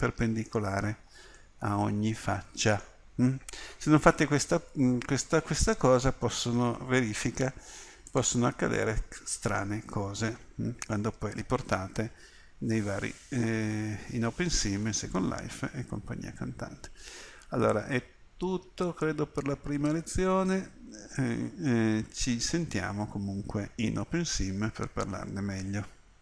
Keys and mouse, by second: 1.2-6.2 middle drag, 8.1-9.7 drag, 10.2 Tab, 13.0 middle click, 13.8 middle click.